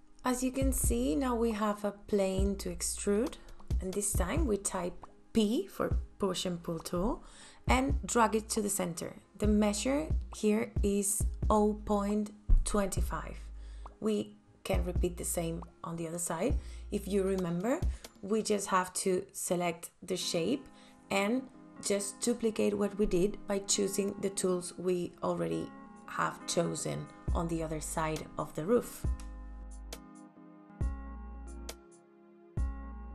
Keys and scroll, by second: 1.3 f, 10.9 ,, 11.1 KP_2, 11.3 KP_Enter, 12.7 space, 21.2 f, 26.1 ctrl+s, 27.8 space, 28.6 l, 31.3 ctrl+z, 32.6 KP_Enter.